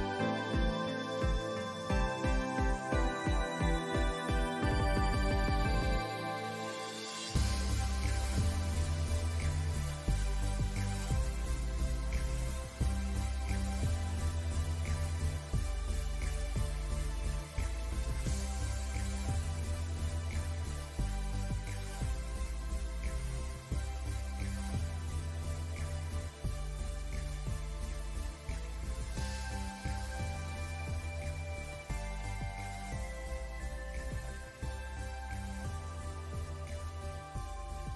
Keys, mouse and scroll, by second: 1.0 alt+Num_Lock, 1.2 click, 2.9 click, 4.6 alt+scroll down 1, 4.8 scroll up 1, 5.0 scroll down 1, 5.1 alt+scroll up 1, 5.2 click, 6.3 scroll down 1, 6.5 click, 7.1 alt+scroll down 1, 7.3 scroll up 1, 8.7 click, 9.2 click, 10.0 alt+scroll up 1, 10.4 alt+scroll down 1, 11.4 ctrl+Num_Lock, 12.3 scroll up 1, 12.5 click, 12.8 alt+scroll up 1, 12.9 alt+scroll down 2, 13.1 alt+scroll up 1, 13.4 click, 15.6 alt+click, 15.7 alt+scroll up 1, 15.8 alt+scroll down 1, 16.1 ctrl+click, 17.6-18.7 ctrl+drag, 18.7 ctrl+click, 19.8 ctrl+shift+[, 20.0 ctrl+z, 21.1-24.8 drag, 25.8 click, 26.6-29.3 drag, 29.3 alt+scroll up 1, 29.4 click, 30.7-31.2 alt+scroll up 1, 31.2 click, 31.9 alt+scroll up 1, 32.6 space, 32.8 scroll down 1, 33.9 click, 36.7 scroll up 1, 37.2 click.